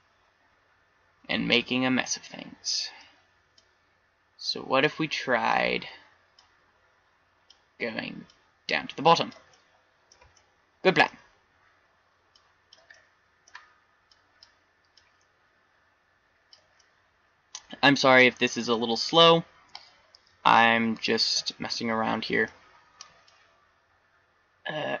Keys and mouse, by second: 0.0-1.6 middle drag, 13.0-14.3 middle drag, 16.8-17.7 middle drag, 21.4-22.4 middle drag, 23.4-25.0 drag.